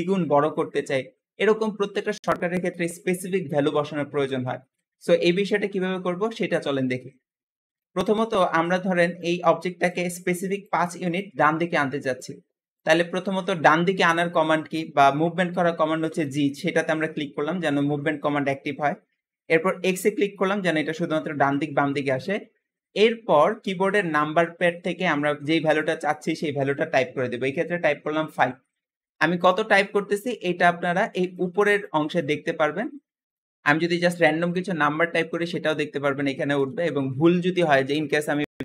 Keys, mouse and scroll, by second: 3.5 ctrl+z, 7.7-13.3 shift+middle drag, 15.9 g.